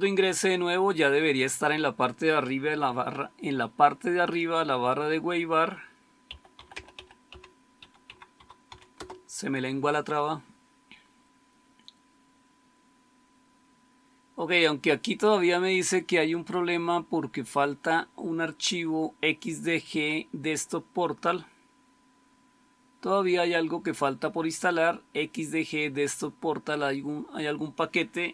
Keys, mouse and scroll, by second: 5.9-9.0 typing.